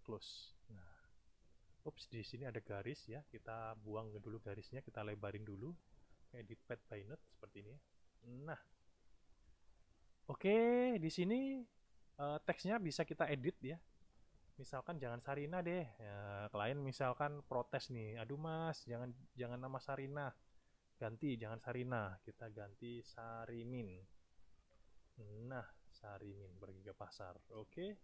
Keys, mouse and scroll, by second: 0.0 click, 1.2 click, 2.7 click, 3.8 click, 5.1-6.6 drag, 6.8 click, 7.6 click, 8.5 space, 9.1 click, 14.5 click, 15.6 click, 22.4 BackSpace, 24.4 m, 24.6 i, 24.8 n.